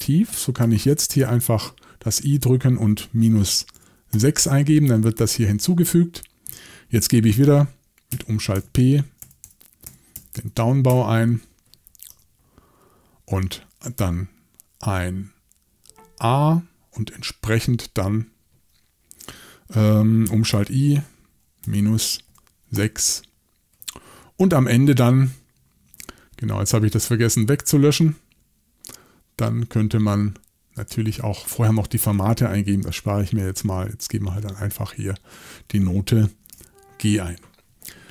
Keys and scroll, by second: 1.2 shift+|, 3.0-4.2 typing, 8.5-10.6 typing, 10.9 Return, 20.5 shift+|, 21.6-22.8 typing, 34.5 8, 36.5 g.